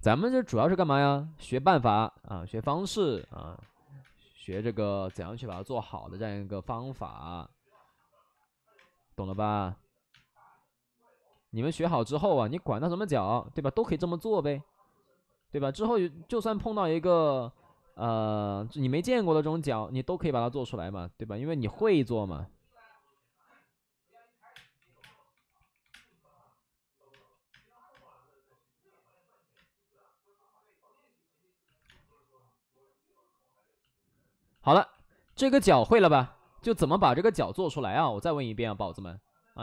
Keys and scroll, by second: 0.9 ctrl+z, 2.9 alt+s, 3.1-5.2 typing, 8.7 space, 9.2 space, 10.0 space, 11.2 ctrl+z, 16.7 alt+s, 17.4 5, 18.5 ctrl+z, 23.0 alt+s, 23.3 alt+s, 24.4-25.8 typing, 27.0 space, 27.4 space, 27.8 space, 29.5 space, 31.6 alt+s, 31.8 space, 34.7 alt+s, 36.5 space, 37.5 space.